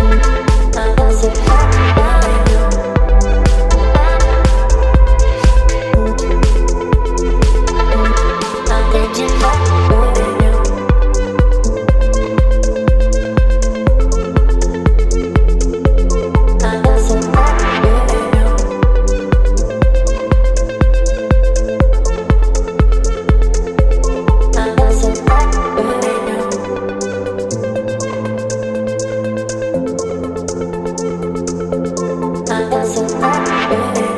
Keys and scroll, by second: 1.9 space, 2.9 Left, 5.0 ctrl+t, 8.5 Return, 9.8 Left, 13.3 space, 18.7 b, 21.9 ], 25.0 [, 25.1 [, 25.2 [, 31.2 b.